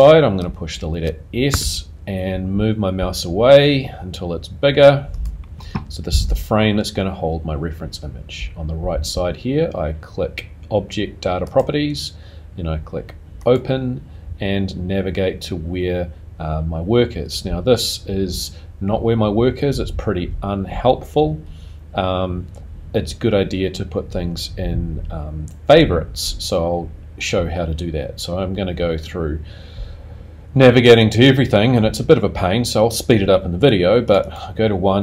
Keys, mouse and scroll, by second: 1.5 s, 11.5 click, 13.4 click.